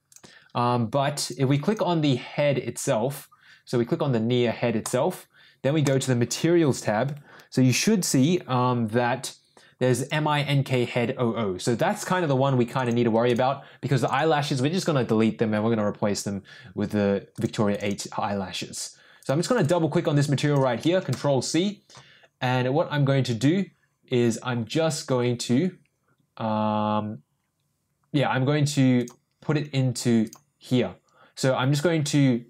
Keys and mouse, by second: 1.1 click, 1.6 click, 4.8 click, 5.8 click, 9.9 click, 10.1-12.0 drag, 12.7 click, 12.8 click, 14.0 click, 14.1 click, 17.3 click, 17.7 click, 17.8-27.8 drag, 29.2-32.4 drag.